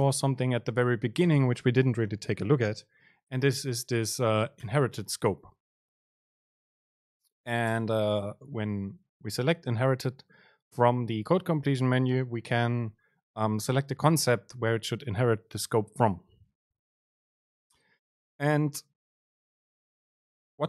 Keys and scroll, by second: 8.1 super+space.